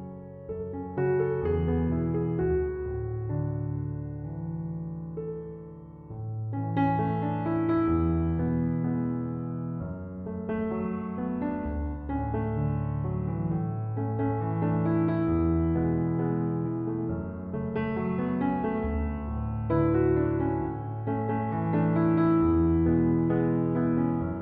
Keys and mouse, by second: 4.8 click, 8.0 s, 10.0-11.2 typing, 11.7 click.